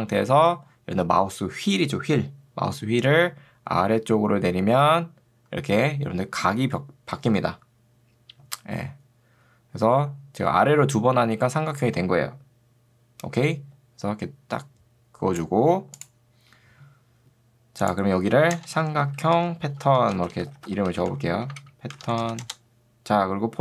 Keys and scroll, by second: 18.7 Return, 18.9-22.8 typing.